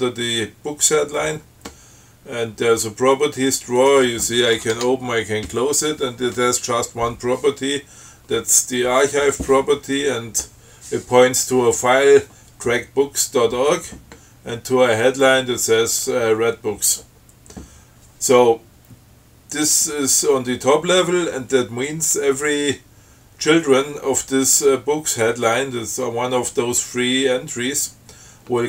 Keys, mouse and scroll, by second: 4.0 click, 4.8 Tab.